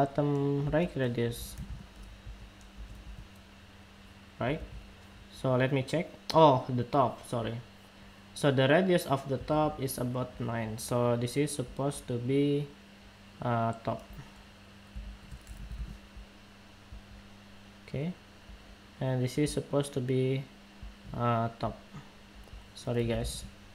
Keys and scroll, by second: 4.2 super+Tab, 9.2 super+Tab.